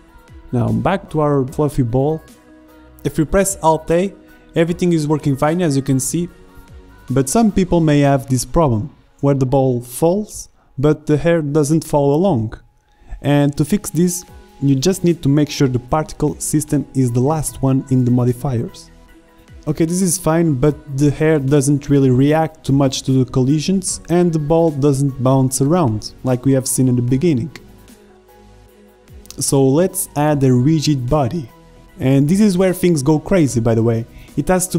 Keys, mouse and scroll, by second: 0.1-0.8 middle drag, 1.9 alt+a, 4.5 alt+a, 5.0 shift+Left, 7.3-8.6 drag, 8.8 click, 9.2 alt+a, 11.1 alt+a, 12.2 shift+Left, 19.3 alt+a, 27.9 alt+a, 30.3 shift+Left.